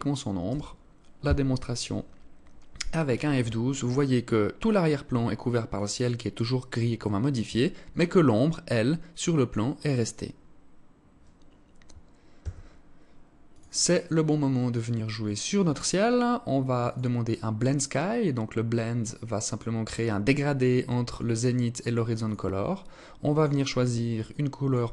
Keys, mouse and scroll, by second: 11.8 Escape, 13.0 click, 14.1-14.8 scroll down 2, 16.4 click, 21.7 click, 22.8 click.